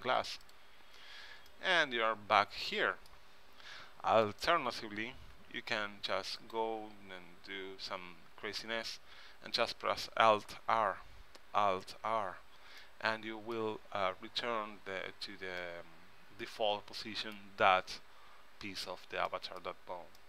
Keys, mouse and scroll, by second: 0.6-3.3 middle drag, 2.1 right click, 4.4-6.1 drag, 5.5 r, 10.8 alt+r, 15.7-17.5 middle drag, 19.4 click, 19.5 middle click, 19.6 click.